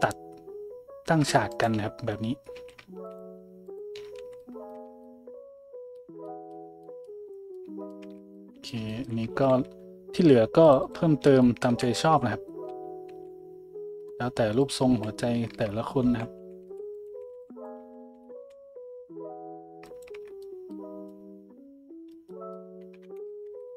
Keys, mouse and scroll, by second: 1.5 alt+shift+click, 2.5 a, 3.1 alt+shift+click, 3.7 alt+shift+click, 4.2 a, 4.7 Tab, 4.7-7.6 middle drag, 7.7 middle click, 8.0 Tab, 8.0-8.8 middle drag, 9.5 ctrl+r, 11.9-12.7 middle drag, 12.7 s, 14.9 ctrl+z, 16.1-18.0 typing, 17.8-21.5 middle drag, 20.1 Tab, 23.0-23.7 middle drag, 23.0 `, 23.4 Tab.